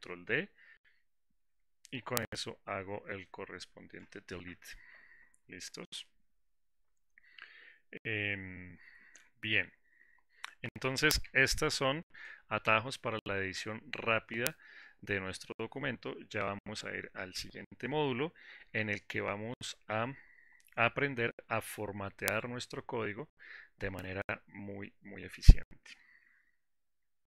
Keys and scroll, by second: 0.1 Delete, 3.1 ctrl+shift+-.